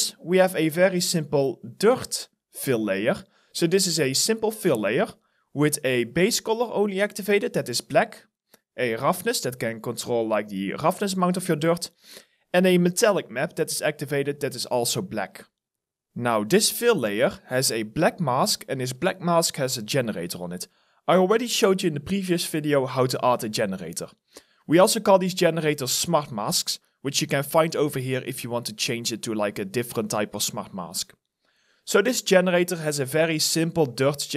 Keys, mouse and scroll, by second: 0.1 alt+middle click, 15.1 alt+right click.